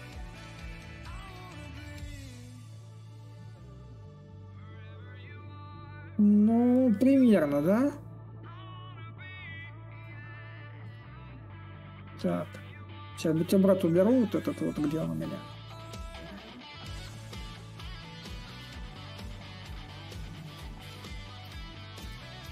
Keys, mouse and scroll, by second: 7.4-9.3 drag, 10.6-15.7 drag, 15.9-20.3 drag, 20.6-22.5 ctrl+drag.